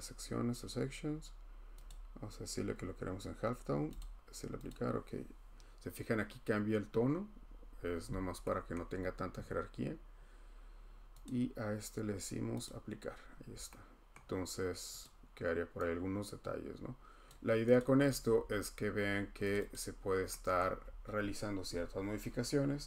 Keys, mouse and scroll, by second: 1.9 click, 4.0 click, 4.7 click, 6.8 scroll, 7.4-7.8 scroll, 8.7 scroll, 11.2 click, 12.6 click, 13.1-14.1 scroll, 15.0 click, 17.2 click, 17.8 click, 18.3 scroll, 19.5 click, 19.7 click, 20.2 middle click, 20.6 middle click, 20.8 middle click, 20.8 middle click, 21.2 middle click.